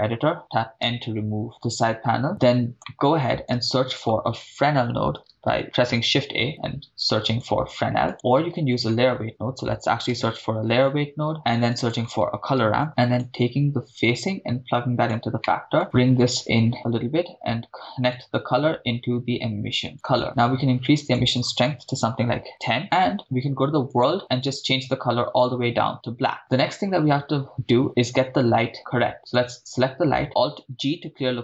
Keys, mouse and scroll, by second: 1.0 m, 2.3 middle click, 2.3-2.7 scroll up 4, 2.9 middle click, 3.5 shift+a, 8.1 middle click, 8.1 click, 8.1 x, 8.3 shift+a, 11.6 shift+a, 12.9-13.3 drag, 14.0-15.1 drag, 15.4-15.8 middle drag, 15.9-16.8 drag, 18.1-20.0 drag, 20.2 middle click, 21.0-22.6 drag, 22.8-23.1 middle drag, 23.9 click, 24.4 click, 29.3 click, 30.4 alt+g.